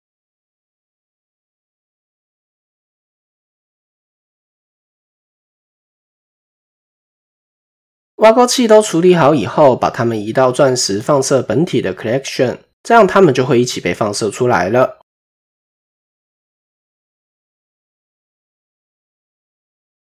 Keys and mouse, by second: 2.7 shift+middle click, 3.1 Tab, 3.6-3.9 shift+middle drag, 4.0 click, 5.6-6.3 shift+middle drag, 6.7 click, 8.0 shift+drag, 15.8 click, 16.6 shift+middle click, 16.6 typing, 17.7 click.